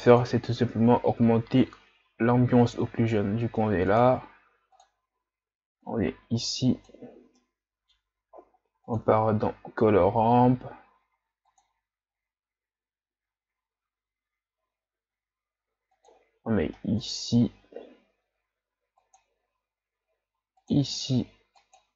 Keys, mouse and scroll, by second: 4.0 click, 7.0 click, 7.5-15.0 middle drag, 15.0 click.